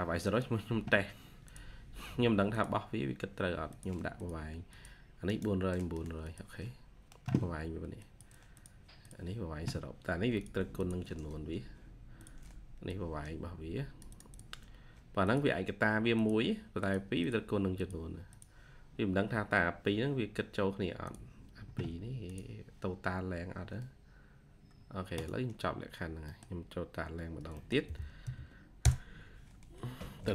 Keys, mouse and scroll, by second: 4.0 double click, 5.1 right click, 6.3 typing, 8.9 double click, 10.7 double click, 14.2 double click, 17.1 double click, 25.7-26.2 scroll up 1, 26.2 middle click, 27.1 scroll up 1, 27.5 middle click, 27.7 t, 29.3-30.3 typing, 29.6 scroll up 1.